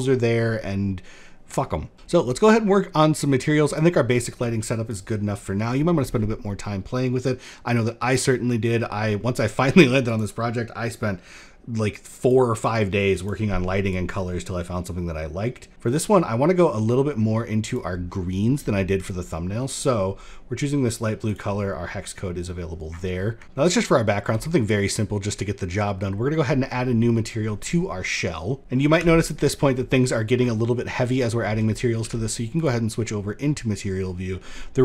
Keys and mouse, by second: 9.8 click, 11.7 click, 18.6 middle click, 19.3 click, 27.1 click, 28.6 n, 29.6 shift+middle click, 30.2 middle click, 31.5 z.